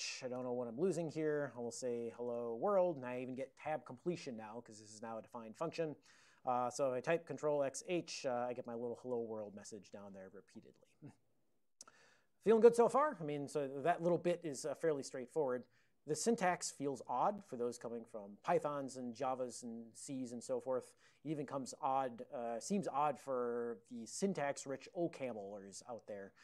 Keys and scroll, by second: 1.5-2.7 typing, 7.5 Return, 7.5 ctrl+x, 8.0 h, 8.9 ctrl+x, 9.2 h, 10.6 ctrl+g, 11.5 ctrl+p, 11.6 ctrl+p, 16.3 Up, 16.5 Up.